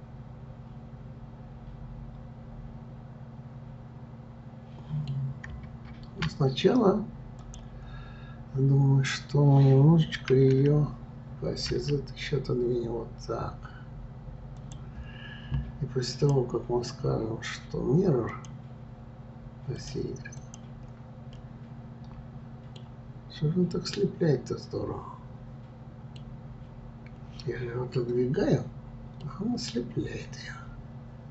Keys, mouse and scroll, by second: 7.4 click, 10.3 r, 16.1-19.1 drag, 19.7 click, 20.4 click, 21.3-23.1 middle drag, 23.1-23.9 scroll up 2, 23.9-26.9 middle drag, 29.2-31.3 middle drag.